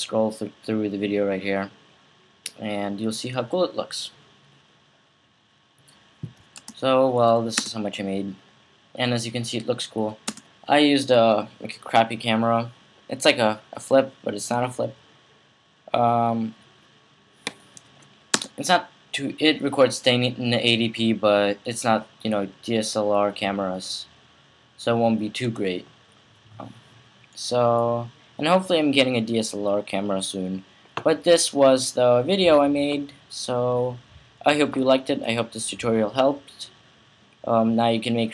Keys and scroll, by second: 6.3 space, 7.4 space, 10.1 space, 18.1 space, 25.2 space.